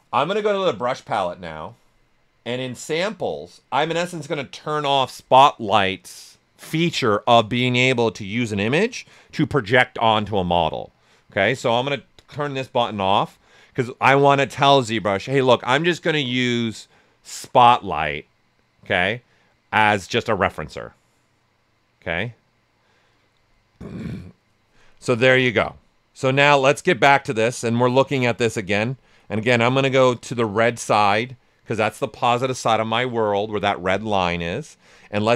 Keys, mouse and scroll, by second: 2.7-5.9 drag, 14.3 typing, 24.9 right click, 24.9 typing, 25.4 alt+right click, 25.8 ctrl+right click, 27.6 right click, 28.5 click, 28.9-35.3 ctrl+right drag, 29.4 typing.